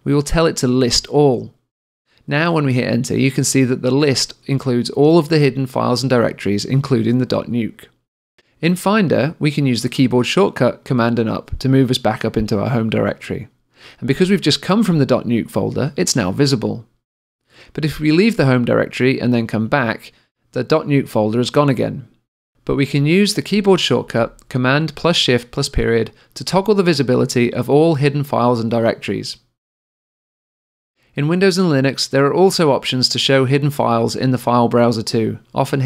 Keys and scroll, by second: 11.1 super+Up, 25.7 shift+super+., 27.7 shift+super+., 29.6 shift+super+..